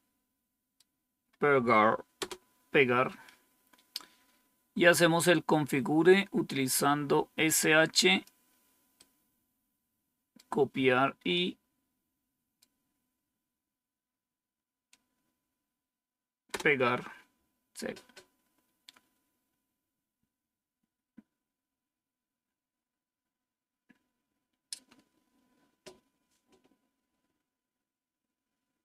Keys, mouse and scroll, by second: 2.1 Return, 3.9 scroll down 2, 6.5-8.2 drag, 8.9-10.3 right drag, 11.2-12.5 right drag, 16.4 Return, 18.5-19.1 scroll down 1, 19.1-19.8 scroll down 1, 19.8-20.7 scroll down 1, 21.0-21.6 scroll down 1, 21.6-22.7 scroll down 1, 22.7-23.4 scroll up 2.